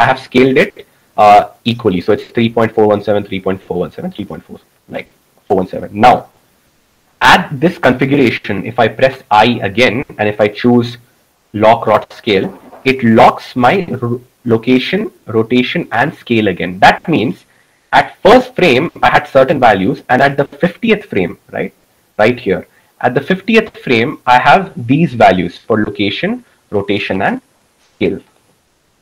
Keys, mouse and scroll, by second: 9.7 i.